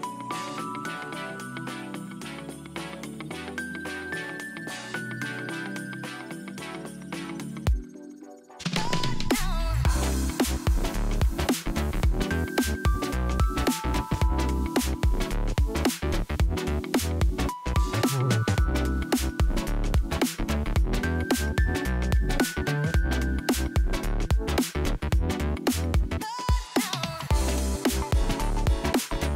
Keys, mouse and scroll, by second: 0.2 click, 1.9 click, 2.0-2.6 middle drag, 2.6 click, 3.9 click, 4.3-5.5 middle drag, 5.5-5.8 scroll down 2, 5.8 click, 6.5 KP_3, 7.1 click, 7.6 g, 8.8 scroll up 2, 9.4 Tab, 10.5 shift+middle drag, 10.7 scroll down 1, 11.2-11.7 scroll up 1, 11.7 Tab, 12.1 click, 12.2 scroll up 1, 12.3-13.6 middle drag, 13.6 shift+a, 14.1 s, 15.6 click, 15.8 scroll down 1, 16.1-19.6 shift+middle drag, 22.3 s, 24.3-26.1 drag, 26.1 KP_0, 28.8 click.